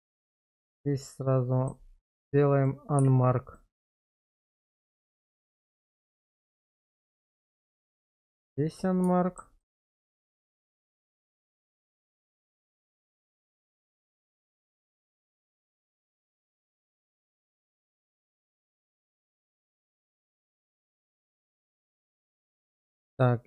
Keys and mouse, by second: 0.1 q, 1.0 middle click, 3.0 q, 4.3 shift+middle click, 4.8-7.1 middle drag, 8.0 q, 9.2 shift+middle click, 10.6 shift+middle click, 11.5-12.5 shift+middle drag, 13.9 middle click, 14.5 shift+middle click, 15.7 shift+middle click, 16.8 click, 18.6 q, 19.9 middle click, 20.4 shift+middle click, 21.1 shift+middle click.